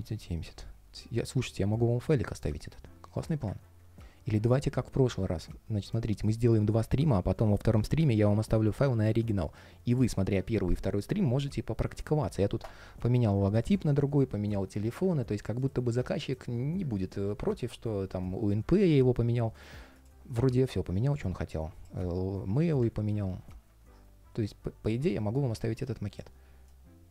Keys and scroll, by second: 21.7 super+space.